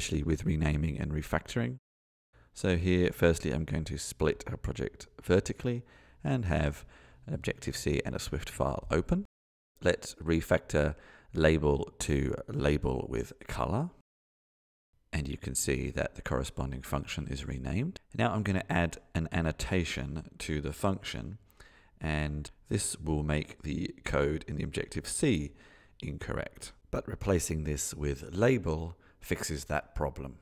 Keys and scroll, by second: 28.6 ctrl+space, 29.0 Tab.